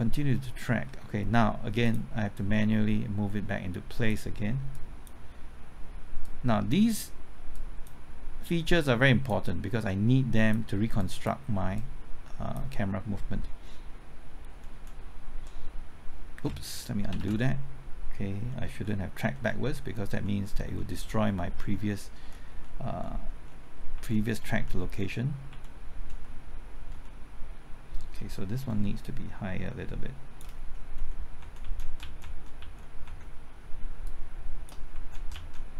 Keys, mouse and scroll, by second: 0.0 alt+Right, 1.8-4.2 drag, 4.2-13.2 drag, 14.5 alt+Left, 17.1 ctrl+z, 18.6 Left, 19.3 Right, 20.1-21.4 typing, 22.4 Right, 22.8 Left, 23.3 Right, 23.9 Left, 24.5 Right, 24.7 Left, 26.1 Right, 28.4-29.2 typing, 29.0 shift+click, 30.9 shift+Left, 31.3 shift+Right, 31.6 shift+Left, 31.7 shift+Right, 32.0 shift+Left, 32.5 shift+Left, 33.0 Right, 34.0 shift+click, 34.9 shift+Left, 35.1 Right.